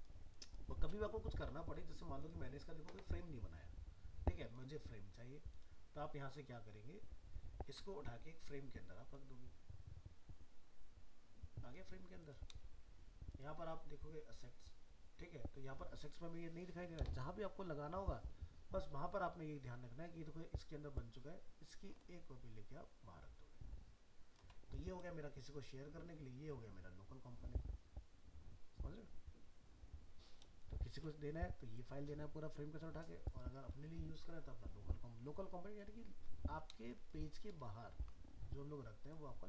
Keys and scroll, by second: 37.6 ctrl+-.